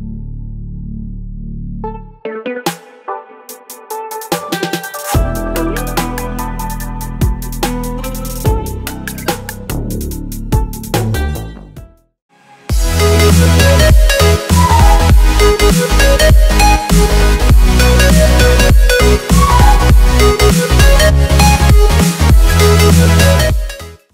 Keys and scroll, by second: 1.0 z, 3.4 v.